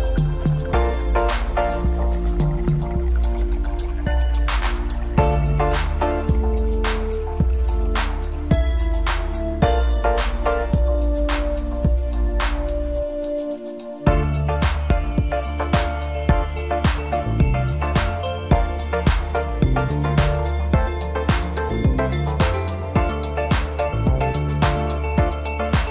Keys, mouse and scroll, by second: 4.1 e, 6.6-9.4 middle drag, 9.4 click, 10.1-12.1 middle drag, 12.1-15.1 drag, 18.0-21.1 middle drag, 21.3-22.2 scroll down 2, 22.2 Tab, 23.3 KP_1, 24.3 shift+d.